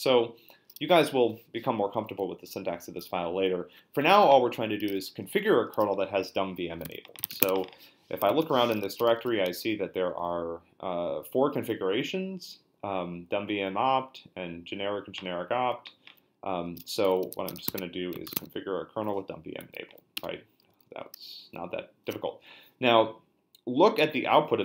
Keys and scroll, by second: 6.6-9.8 typing, 16.7-18.3 typing, 18.4 Tab, 20.2 Return.